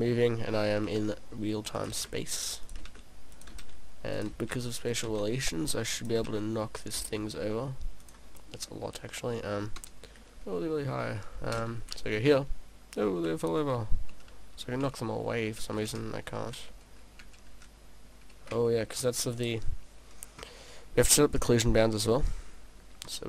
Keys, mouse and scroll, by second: 0.8 shift+d, 1.9 click, 2.4 shift+d, 2.8 click, 3.5 click, 3.7 shift+d, 4.3 click, 4.4 shift+d, 5.0 click, 5.3 shift+d, 6.1 click, 6.3 shift+d, 7.0 click, 7.1 shift+d, 8.4 click, 8.5 middle click, 9.8 KP_0, 11.6 p, 18.8 `, 19.4 right click, 23.1 click.